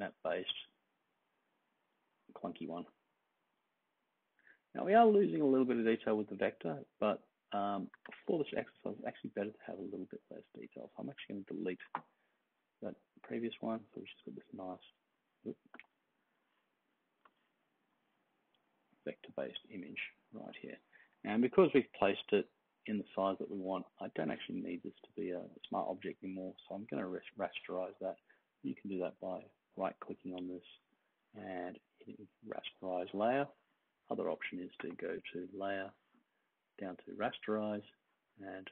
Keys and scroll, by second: 11.8 BackSpace, 21.0 super+-, 21.2 super+-, 21.7 super+-, 22.2 super+=.